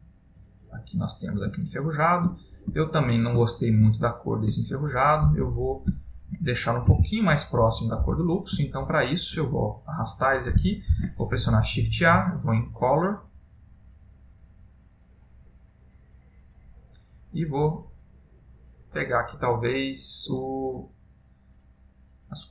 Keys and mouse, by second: 0.0 middle click, 1.8 ctrl+middle click, 2.4 ctrl+middle click, 2.9 ctrl+middle click, 3.7 middle click, 4.2 ctrl+middle click, 4.7 middle click, 5.7 click, 6.4 shift+click, 7.0 g, 8.8 ctrl+middle click, 11.1 shift+a.